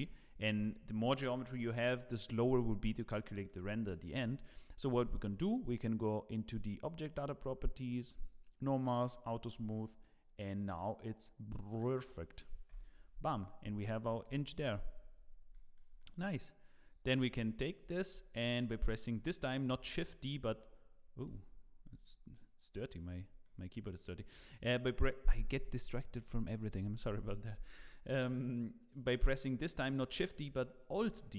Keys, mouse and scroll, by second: 0.0 ctrl+z, 0.6 Tab, 3.2 middle click, 3.9 shift+middle click, 8.2 click, 9.0 click, 9.8 click, 10.0 middle click, 10.9-11.4 scroll down 1, 11.4 scroll up 2, 11.9 middle click, 12.7 KP_0, 15.0-15.6 scroll down 5, 15.5 middle click, 16.0 middle click, 16.7 click, 17.1 scroll down 1, 17.4 shift+middle click, 17.9 scroll down 2, 18.2 shift+middle click, 23.4 middle click, 28.2 middle click, 30.5 middle click, 30.9 alt+d.